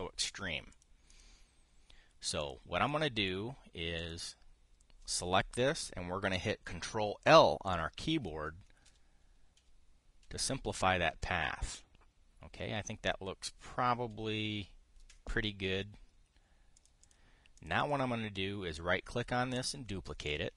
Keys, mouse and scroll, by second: 1.4 click, 1.8-3.3 drag, 4.1-8.9 drag, 9.6 ctrl+l, 10.3 ctrl+l, 11.0 ctrl+l, 14.8 ctrl+l, 15.9-17.6 drag, 17.7 click, 18.3 click.